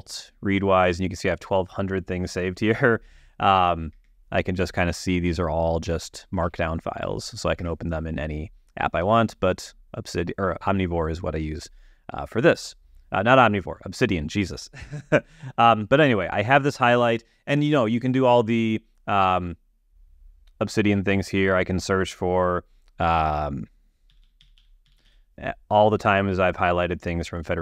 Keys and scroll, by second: 4.2 space, 5.6 Right, 7.9 space, 9.3 super+w, 24.2-25.9 typing.